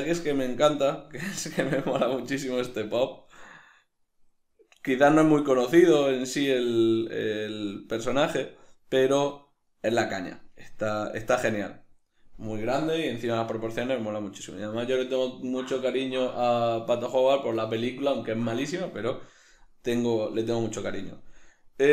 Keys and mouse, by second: 0.0 ctrl+space, 0.0-21.9 middle drag.